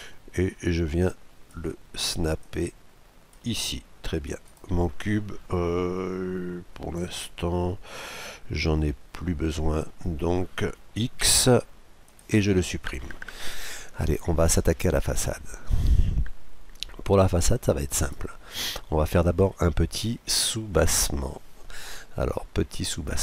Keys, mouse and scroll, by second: 2.4-4.2 drag, 3.5-5.2 middle drag, 4.4-6.2 right drag, 6.4 right click, 11.2 x, 12.9-13.8 scroll down 2, 13.0 middle click, 13.8-15.7 middle drag, 18.0-19.6 right drag, 18.5 KP_Decimal, 19.3-20.0 scroll down 1, 20.0-21.8 middle drag, 21.8-22.7 scroll down 1, 22.7-23.2 scroll down 1.